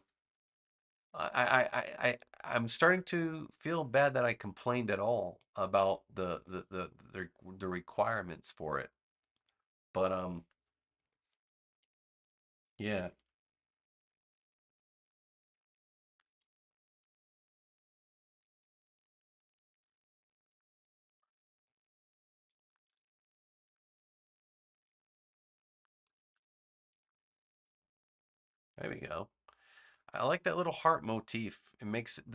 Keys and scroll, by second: 10.9 super+Return, 19.7 v, 26.9 super+-.